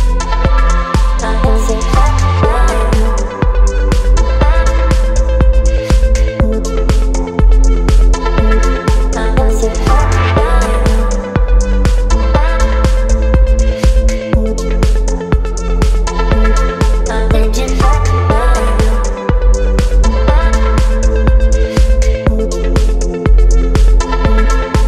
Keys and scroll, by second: 17.1 Return.